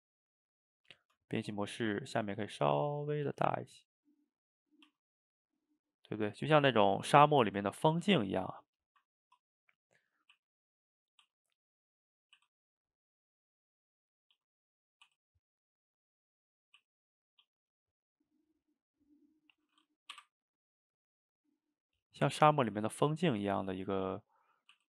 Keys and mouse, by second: 0.4 middle click, 0.9 Tab, 1.5 click, 1.7-2.3 middle drag, 2.3 s, 6.4 middle click, 7.0 shift+right click, 7.3 ctrl+middle click, 8.1 Tab, 8.5 click, 8.9-10.3 shift+middle drag, 10.3 e, 13.9 middle click, 14.4 s, 16.8 e, 17.4 s, 19.1-20.2 middle drag, 20.2 i, 22.5-24.1 middle drag, 24.1 s.